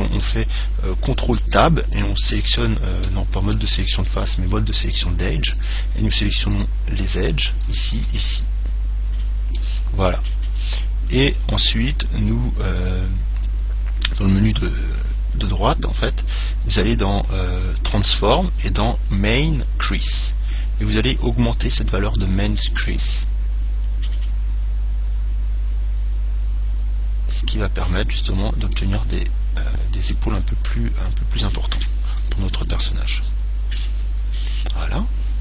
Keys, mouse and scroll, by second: 1.6 ctrl+Tab, 2.3 click, 3.5 ctrl+Tab, 5.7-9.7 right drag, 8.5-10.3 middle drag, 10.5-13.6 scroll up 1, 13.6 scroll up 1, 20.8 click, 29.3-31.1 middle drag, 32.8 Tab, 33.5-35.4 middle drag.